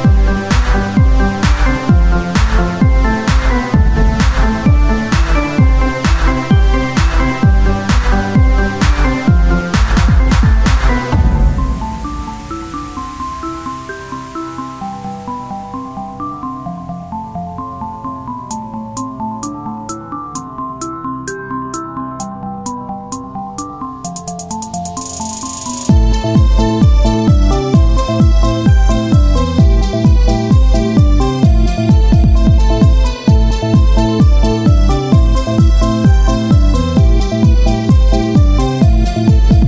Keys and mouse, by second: 0.4 z, 1.4 z, 2.8 r, 4.2-5.5 drag, 5.5 s, 9.2-13.5 drag, 10.9 Tab, 13.5 Tab, 15.7 Tab, 16.0-17.8 drag, 17.9 s, 19.1-20.5 drag, 20.1 z, 20.7 click, 21.9 click, 22.4 z, 23.0 Tab, 26.9 Tab, 27.4-28.6 drag, 28.7 o, 29.1 s, 30.2-31.4 drag, 31.9-33.2 right drag, 33.2 Tab, 35.0 Tab, 35.0-37.6 right drag, 37.2 z, 37.6 KP_1, 38.9 o.